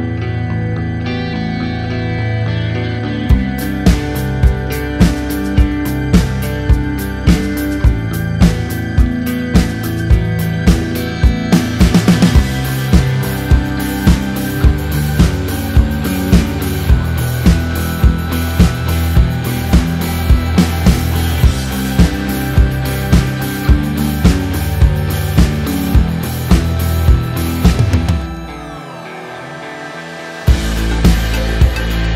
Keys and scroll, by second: 13.2 d, 14.8 f.